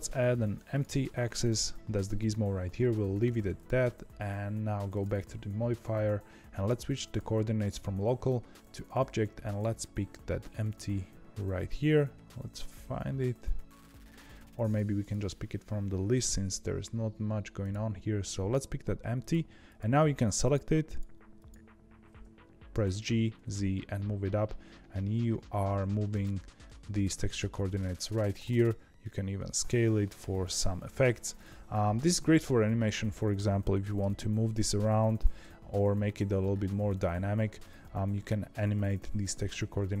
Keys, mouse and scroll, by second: 3.5 click, 4.8 click, 6.9-9.5 drag, 14.9-17.9 drag, 19.1 click, 19.6 click, 20.4 click, 20.8 click, 21.3 click, 22.6 g, 26.6-28.3 middle drag, 28.3 s, 33.9 g, 37.7-40.0 middle drag.